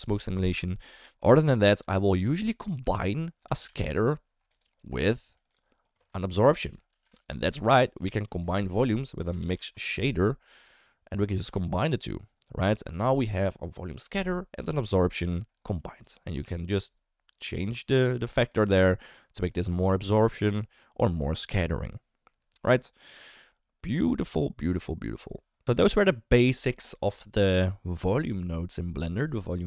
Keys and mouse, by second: 1.7 ctrl+x, 2.3 shift+a, 5.1-5.5 drag, 6.0 shift+a, 8.4 shift+a, 11.3 click, 12.7 shift+middle click, 15.9 middle drag, 16.4-25.1 drag.